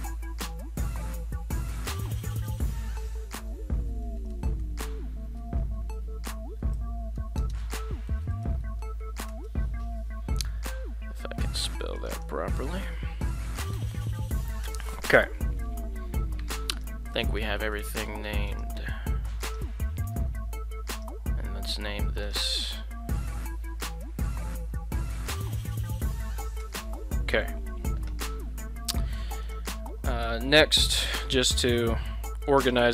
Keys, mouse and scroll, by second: 1.0 right click, 2.4-10.1 drag, 12.1-15.5 drag, 16.7 right click, 17.2 shift+middle click, 17.6 shift+middle drag, 17.9 shift+middle drag, 18.5 right click, 19.4 right click, 20.3 ctrl+z, 20.9 right click, 22.3-27.3 drag, 29.4 right click, 30.7 shift+right click, 31.8 shift+right click, 32.6 shift+right click.